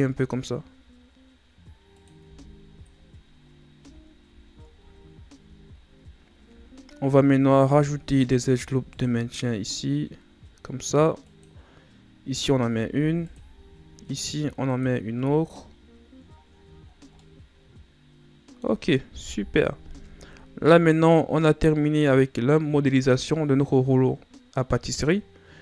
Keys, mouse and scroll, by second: 2.1 Tab, 2.8-3.5 scroll down 7, 3.7 a, 4.0-4.5 scroll down 7, 4.8 scroll up 5, 5.7-7.3 shift+scroll up 15, 7.5 Tab, 8.6 ctrl+r, 12.9 ctrl+r, 15.1 Tab, 15.4 scroll down 3, 16.1-16.8 scroll down 6, 16.8-17.1 scroll down 1, 17.1-19.1 middle drag, 19.1 KP_1, 20.7 right click.